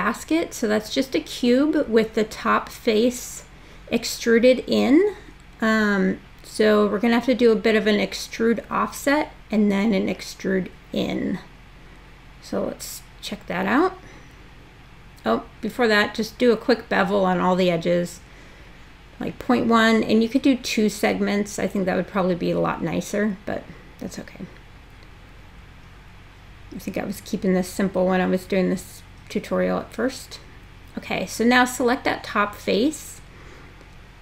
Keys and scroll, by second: 16.4-17.4 typing, 17.6 Tab, 33.6 super+e.